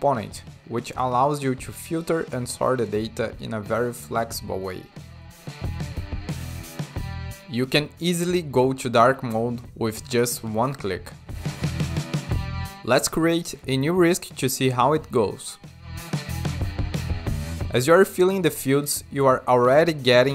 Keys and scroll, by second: 0.0-0.5 typing, 14.4-16.5 typing.